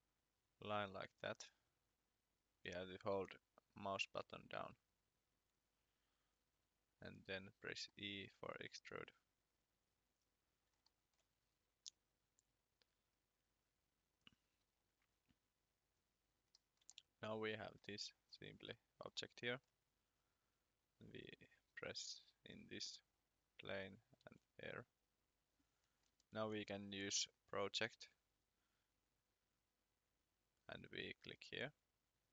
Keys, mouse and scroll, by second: 2.3 click, 6.6 e, 10.8 shift+middle click, 12.1 click, 16.6 middle click, 16.9 shift+middle click, 18.2 scroll down 1, 18.6-19.0 scroll up 1, 19.2 shift+middle click, 20.1 click, 25.8-26.5 scroll, 26.5 p, 31.6 click.